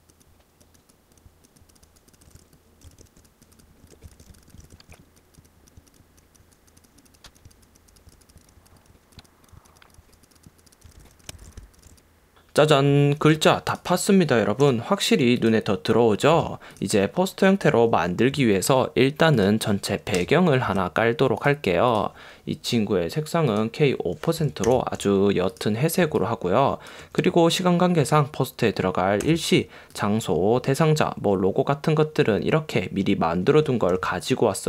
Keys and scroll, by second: 2.5 v, 4.1 space, 4.3 v, 4.5 v, 5.1 shift+x, 8.3 space, 8.6 space, 9.0 space, 11.2-12.4 typing, 13.5 v, 14.7 i, 16.4 v, 17.8 m, 20.3 Return, 26.1 space, 34.2 space.